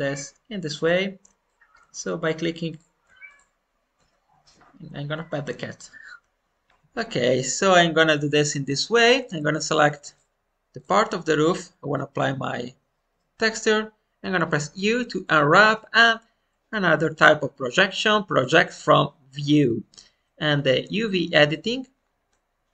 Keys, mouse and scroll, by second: 1.4 shift+middle click, 2.6 click, 3.2-4.5 shift+drag, 6.7 shift+middle click, 8.7 shift+middle click, 9.4-11.8 drag.